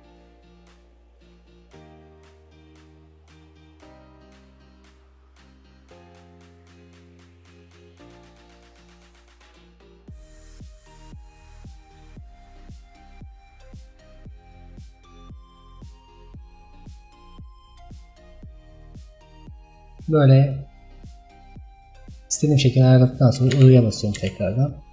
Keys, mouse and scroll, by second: 1.6-9.0 drag, 10.2-21.0 drag.